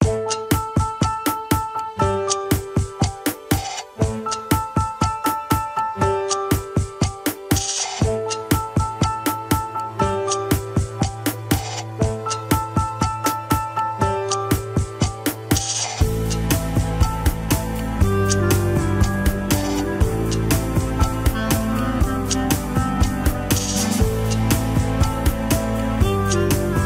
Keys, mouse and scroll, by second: 2.2 alt+z, 3.4 alt+z, 4.2 shift+middle click, 4.5 alt+z, 4.8 ctrl+Tab, 5.8 click, 5.9 scroll up 2, 6.4 Tab, 6.6 alt+z, 7.8 click, 8.9 h, 9.3 click, 10.3 click, 13.2 KP_1, 14.0 alt+z, 14.5 alt+z, 16.3-17.8 middle drag, 17.8 click, 18.2 KP_1, 18.4 alt+z, 19.0 click, 20.3-22.3 middle drag, 22.9 click, 23.9 KP_1, 24.2 scroll down 2, 24.5 ctrl+Tab, 25.2 ctrl+s, 25.5 scroll up 2, 25.9-26.8 middle drag.